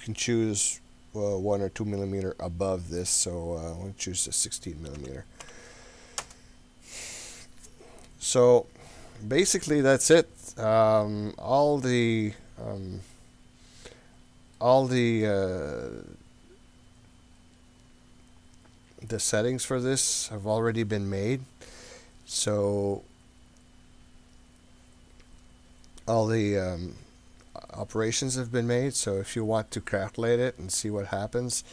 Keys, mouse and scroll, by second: 8.9-11.1 middle drag, 11.1 scroll up 1, 11.3-12.0 scroll down 5, 12.3 scroll up 2, 13.1-14.6 middle drag, 17.2-18.1 scroll down 6, 18.0-18.8 scroll up 4, 19.4 click, 21.3 scroll down 2, 21.5-22.0 scroll up 2, 24.2-25.0 scroll down 7, 28.6-30.3 scroll up 6, 30.5 scroll down 2, 31.6 scroll down 1.